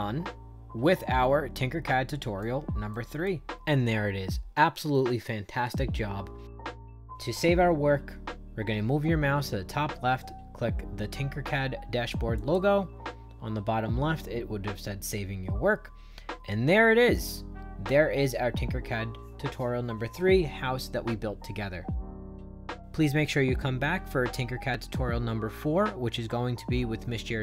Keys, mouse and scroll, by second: 2.8 right click, 3.5 shift+right click, 12.3 click.